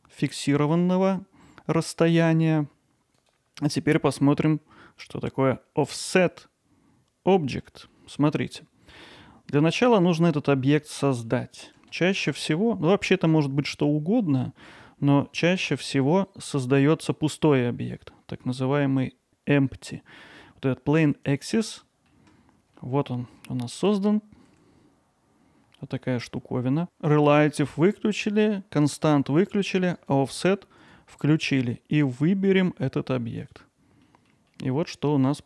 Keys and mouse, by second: 3.2 click, 7.9-8.3 middle drag, 9.0 alt+middle click, 10.9-11.2 middle drag, 14.9 middle click, 21.8 middle drag, 30.0 click, 30.8 click, 31.9 click, 34.1 middle drag, 34.5-35.4 alt+middle drag.